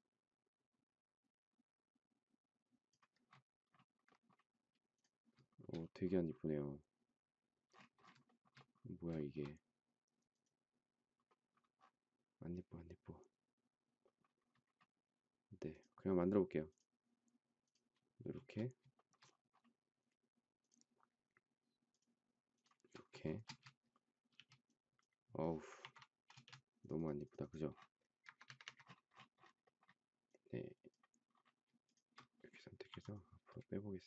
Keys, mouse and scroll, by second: 5.5 shift+middle click, 8.2 shift+middle click, 9.1 shift+middle click, 18.4 space, 18.9 shift+middle click, 23.4 space, 24.3 e, 25.8 ctrl+z, 26.3 space, 28.1 Escape, 28.4 Escape, 31.8 shift+click, 32.9 m.